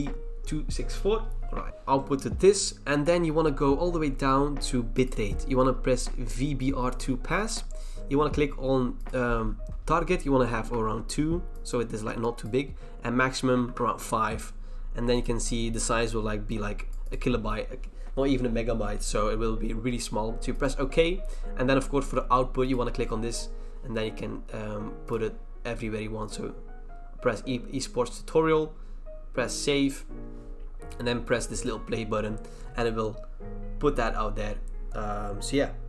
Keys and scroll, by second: 10.7 @, 11.8 2, 13.6 5.